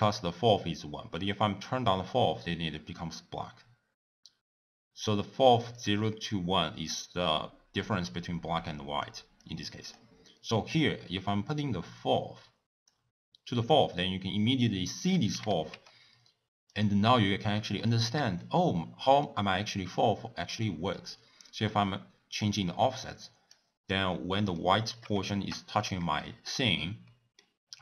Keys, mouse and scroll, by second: 0.6-3.5 drag, 5.9-13.1 drag, 15.1 click, 15.3 g, 17.8-21.2 shift+middle drag, 21.2-24.1 drag, 24.1-25.7 middle drag, 25.7-26.2 scroll up 1, 26.2-27.8 shift+middle drag.